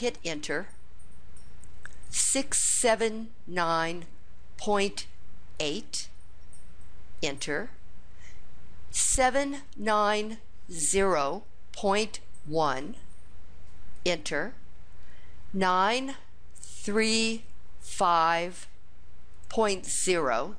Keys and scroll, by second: 0.0 Return, 1.9 Return, 5.3-6.0 typing.